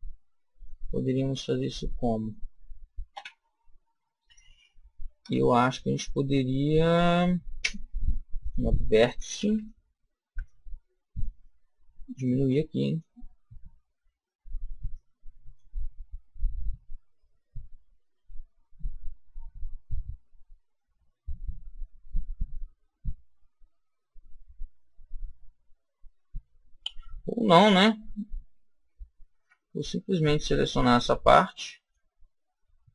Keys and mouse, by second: 0.8-2.1 middle drag, 3.0 KP_1, 5.1 a, 8.3 click, 10.2 b, 12.1 click, 14.8-16.6 drag, 18.0 a, 29.2 b.